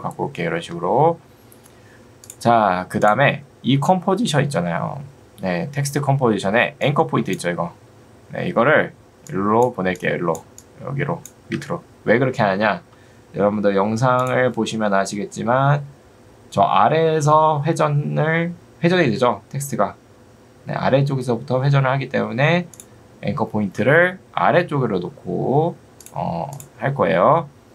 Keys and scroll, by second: 0.6 v, 11.6 Escape.